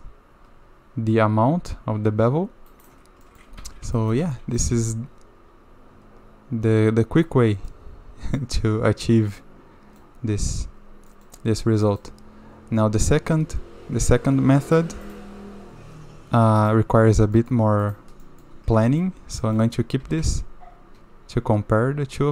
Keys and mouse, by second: 3.2 middle click, 3.6 shift+z, 4.0 shift+middle drag, 4.3 shift+z, 4.6-7.2 middle drag, 7.7-8.4 middle drag, 9.3-10.0 middle drag, 11.1 middle click, 11.8 middle drag, 16.6 click, 17.4 middle click, 18.2 middle drag, 18.9 shift+middle drag, 19.4 click, 20.0 g.